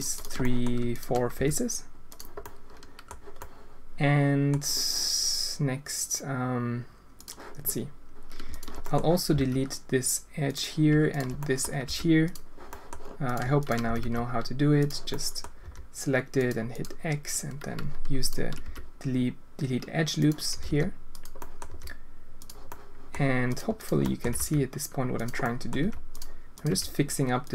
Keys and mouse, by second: 0.4 click, 0.9 shift+click, 1.3 x, 2.4-3.0 drag, 3.3-4.5 drag, 7.1 click, 8.8 click, 9.3 x, 11.3 click, 11.8 x, 12.6 click, 13.5 shift+click, 13.8 g, 15.1 drag, 15.6 g, 16.7 click, 18.2 alt+click, 18.6 x, 20.1 click, 20.5 g, 21.3 click, 21.6 g, 22.6 click, 23.5 click, 24.0 click, 25.1 g, 25.4 click, 25.8 g, 26.6 g.